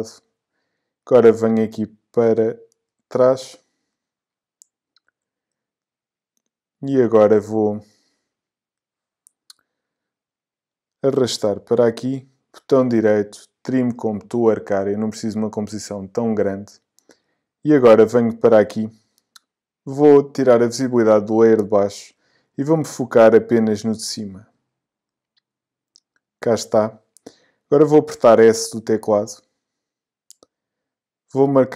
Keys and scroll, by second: 28.9 s.